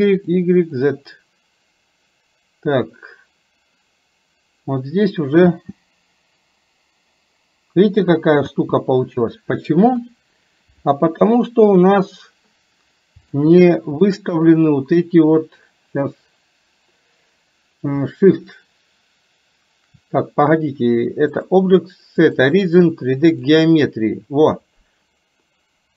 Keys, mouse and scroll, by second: 0.2 click, 5.6 space, 8.5 space, 10.0 KP_3, 11.9 click, 13.4 shift+middle click, 21.4-23.6 drag.